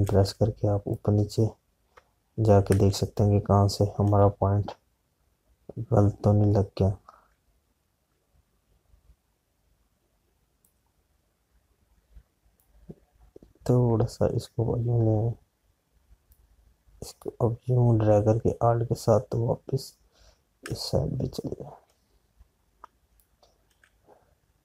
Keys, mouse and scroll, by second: 0.0 click, 0.0 space, 0.4 space, 2.1 alt+click, 4.2 space, 12.7 click, 17.8 click, 21.7 space, 21.8 click, 23.9 space.